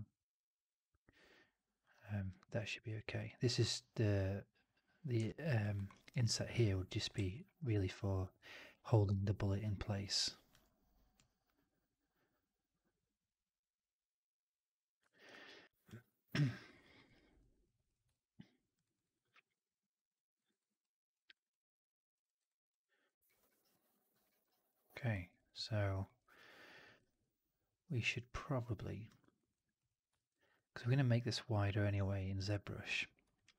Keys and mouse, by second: 5.1-5.5 alt+drag, 5.6 alt+middle drag, 5.8 alt+right drag, 6.0 alt+right drag, 6.2 alt+drag, 7.4 alt+right drag, 7.6-8.1 alt+drag, 8.3-10.4 drag, 15.0 alt+right drag, 15.2-15.5 alt+drag, 15.7 alt+right drag, 16.0-16.3 alt+drag, 16.4 alt+right drag, 16.6 alt+drag, 16.8 alt+middle click, 17.0 alt+right drag, 17.3 alt+drag, 18.0-18.6 alt+drag, 18.7 alt+right drag, 18.9 alt+right drag, 19.1-20.0 alt+drag, 20.3 alt+right drag, 20.5 alt+right drag, 20.7-21.0 alt+drag, 21.1 alt+right drag, 21.4-22.0 alt+drag, 22.1 alt+middle drag, 22.3 alt+right click, 22.6 alt+click, 23.1 alt+middle drag, 23.5 alt+right click, 23.8 alt+click, 24.1 alt+middle drag, 24.3 alt+right click, 24.6 alt+click, 25.0 alt+middle drag, 25.2 alt+right drag, 25.5 alt+click, 25.9 alt+middle drag, 26.1 alt+right drag, 26.3-26.6 alt+drag, 26.7 alt+middle drag, 26.9 alt+right drag, 27.1-28.9 alt+drag, 29.1 alt+right drag, 29.7-30.0 drag, 30.0 alt+middle drag, 30.2 alt+right drag, 30.4 alt+drag, 32.1 alt+drag, 33.2 alt+right drag, 33.4-33.5 alt+drag.